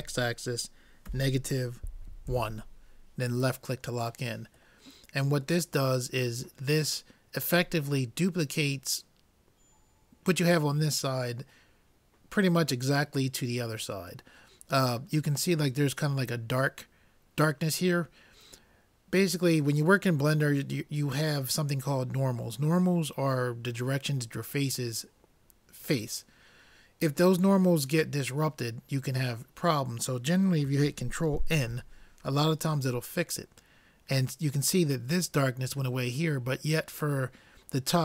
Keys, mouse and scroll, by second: 4.8-6.6 middle drag, 6.6 click, 14.4 middle click, 16.1 scroll up 1, 31.6 ctrl+n.